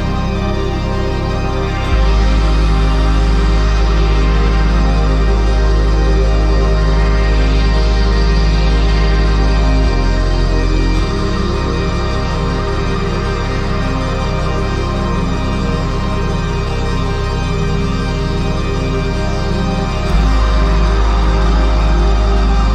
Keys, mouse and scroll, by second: 5.9 right click, 7.8 right click, 9.3 ctrl+z, 15.0 right click.